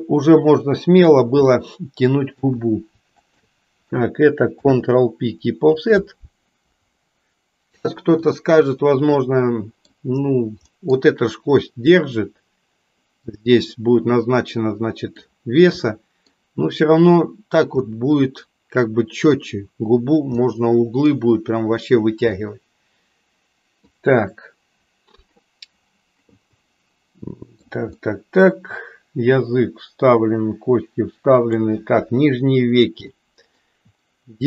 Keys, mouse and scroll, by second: 1.4 middle click, 3.1 shift+click, 8.2-9.8 middle drag, 10.7 middle click, 14.6 middle click, 15.8 middle click, 17.9-19.4 middle drag, 20.4 middle click, 22.5-23.9 middle drag, 26.6-27.7 middle drag, 28.1-31.5 middle drag, 31.9 KP_1, 33.1 shift+middle click.